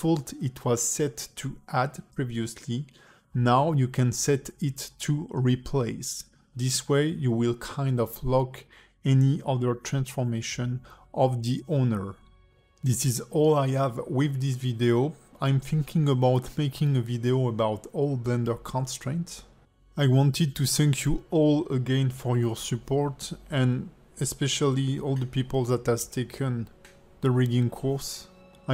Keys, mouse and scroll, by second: 0.7-1.8 scroll down 15, 1.8 click, 1.8 scroll down 4, 4.5 click, 4.9 g, 6.9 click, 7.3 g, 8.9 alt+middle click.